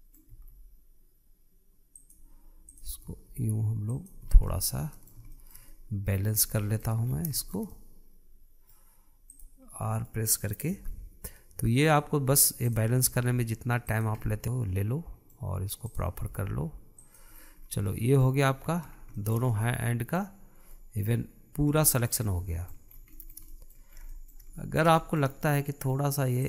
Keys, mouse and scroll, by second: 0.3-1.1 middle drag, 1.1 r, 3.4 click, 3.8 r, 5.0 scroll down 4, 5.2-7.1 middle drag, 7.1 scroll up 2, 7.3-7.8 shift+middle drag, 8.1-10.0 shift+middle drag, 10.0 drag, 10.5-11.4 middle drag, 11.4 r, 13.4 drag, 13.8 r, 14.9 scroll down 1, 15.2-16.7 middle drag, 16.7 click, 17.1 r, 18.1-18.7 scroll down 5, 18.7-19.3 middle drag, 19.3 scroll up 1, 19.4-20.0 scroll down 1, 20.0-23.7 shift+middle drag, 23.7 scroll up 2, 23.9-24.7 shift+middle drag, 24.7 scroll up 1, 24.9-26.4 shift+middle drag.